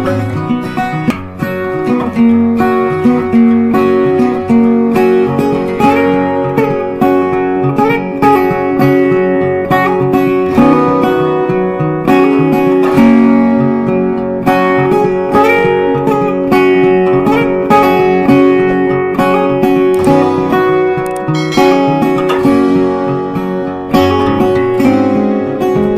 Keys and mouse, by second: 15.2 right click, 16.7 click, 19.1 c, 20.0-25.3 drag.